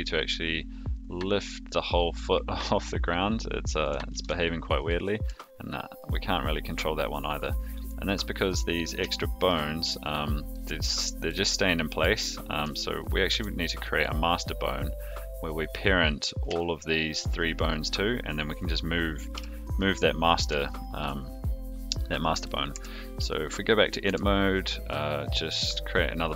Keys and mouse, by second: 4.1 ctrl+z, 4.7 click, 5.2 g, 8.5-8.8 middle drag, 9.0-9.4 shift+middle drag, 10.5-10.9 middle drag, 11.7 middle drag, 13.3 ctrl+z, 16.3 click, 17.0 shift+drag, 19.3 KP_3, 20.6-21.0 shift+middle drag, 22.5 drag, 22.7 Tab, 24.0 e.